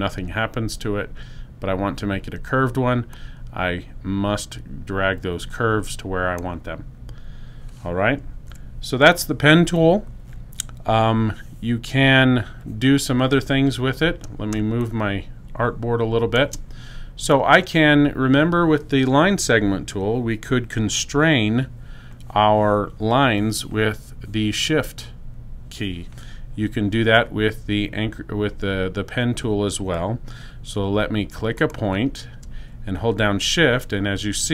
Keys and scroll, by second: 14.4 space.